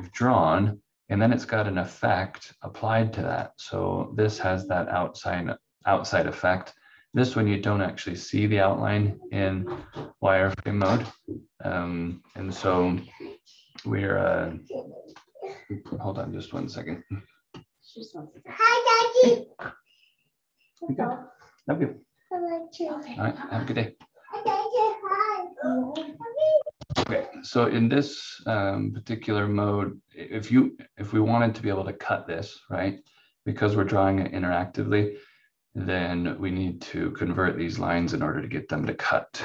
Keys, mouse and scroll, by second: 0.1 click, 3.3 click, 7.1 click, 24.6 click, 32.9 click, 38.0 click.